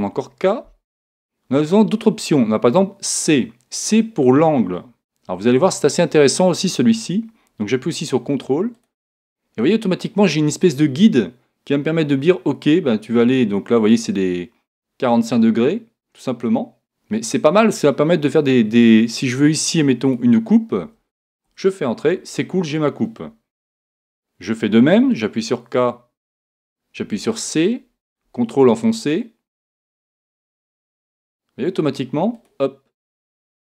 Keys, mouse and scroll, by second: 0.1 k, 25.4 k.